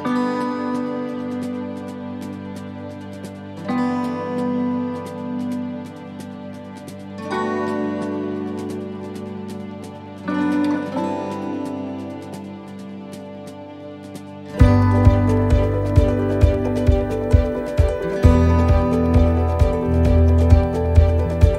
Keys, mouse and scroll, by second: 7.9-8.5 scroll up 2, 8.3 shift+middle click, 8.8 scroll down 1, 10.9 click, 18.5 middle click, 20.4 scroll down 1, 21.0 shift+middle click, 21.0 scroll down 1, 21.4 middle click.